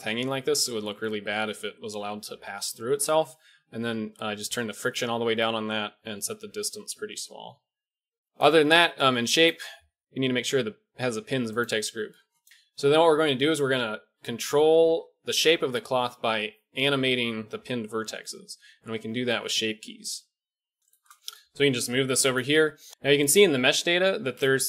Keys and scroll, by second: 21.7 g.